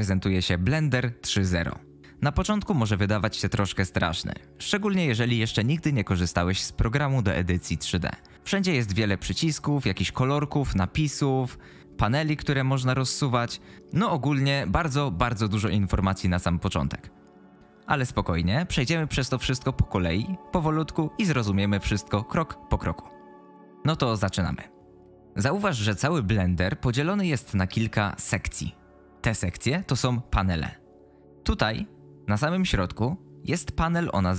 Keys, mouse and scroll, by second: 12.5 click, 12.9 click.